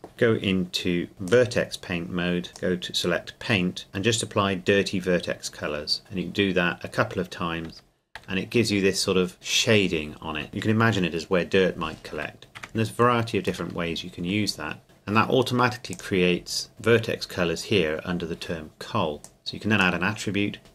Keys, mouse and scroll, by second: 0.1 click, 1.3-2.5 drag, 7.7 Tab, 9.3-10.4 scroll up 2, 10.4 Tab, 13.7 middle click, 15.9 click, 16.5-17.7 scroll down 1, 19.2 click.